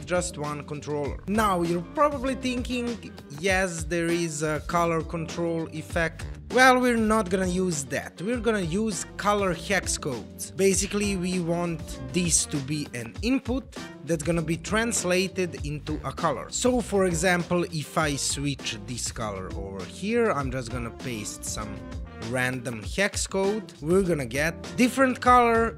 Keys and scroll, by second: 18.7 super+v.